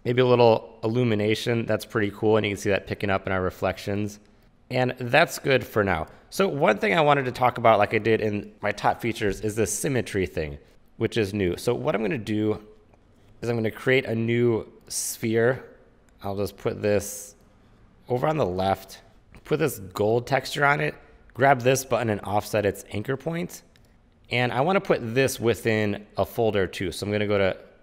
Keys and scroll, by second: 19.1 super+z, 23.9 super+z.